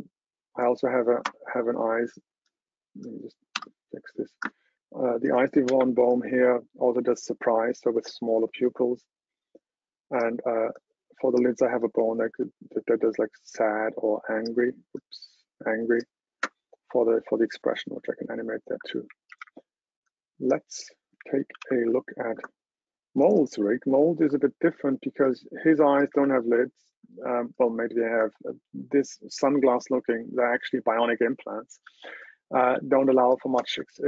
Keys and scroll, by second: 19.1 super+w, 21.7 super+h.